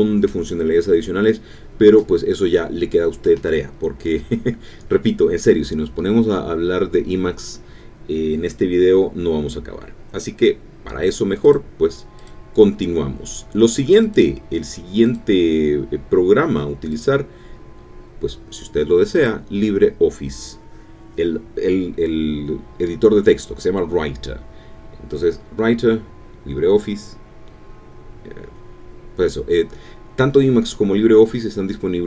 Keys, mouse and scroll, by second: 8.7 alt+F4, 12.4 alt+F2, 12.8 alt+l, 12.9 alt+i, 13.1 alt+b, 13.2 alt+r, 13.2 alt+e, 14.0 Down, 15.1 Return, 16.2 Return, 29.1 click, 29.8 click.